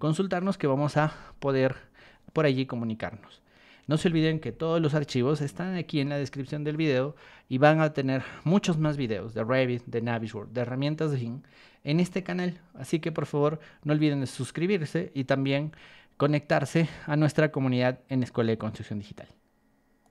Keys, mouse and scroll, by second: 20.0 click.